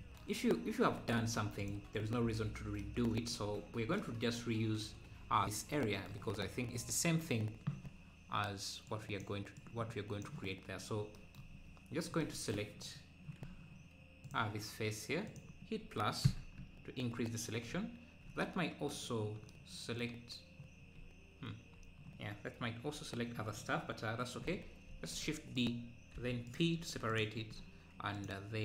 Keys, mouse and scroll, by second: 0.9 Tab, 1.4 Tab, 1.7 click, 2.1 Tab, 3.3 scroll down 2, 10.8 Tab, 10.9 scroll up 1, 11.5 scroll down 1, 14.3-15.4 drag, 16.3 ctrl+KP_Add, 16.6 ctrl+KP_Add, 19.2-19.5 scroll down 1, 20.8 scroll down 2, 22.8 KP_Decimal, 23.5 KP_Decimal, 23.5-24.1 scroll down 1, 24.9 shift+d, 26.6 p, 26.8 Tab, 27.2 Left.